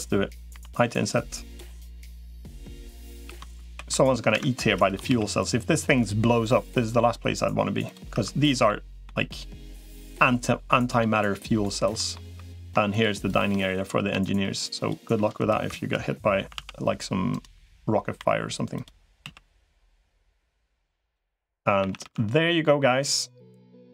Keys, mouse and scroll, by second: 0.3 typing, 1.6 middle click, 2.1 i, 2.6 middle click, 3.1 ctrl+z, 3.5 ctrl+e, 4.9 ctrl+r, 8.1 3, 8.5 middle click, 9.5 middle click, 10.5 middle click, 11.8 middle click, 12.1 3, 12.7 shift+click, 13.1 click, 13.9 i, 16.3 alt+s, 16.3 i, 18.1 i, 19.1 alt+s, 21.7 a, 21.9 g.